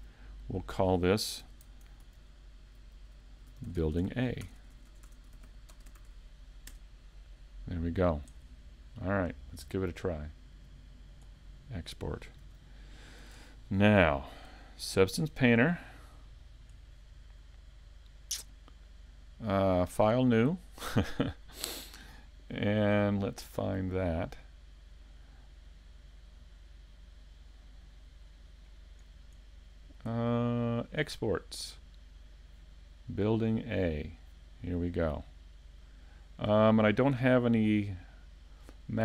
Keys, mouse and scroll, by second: 11.2 click, 12.5 a, 14.1 shift+middle click.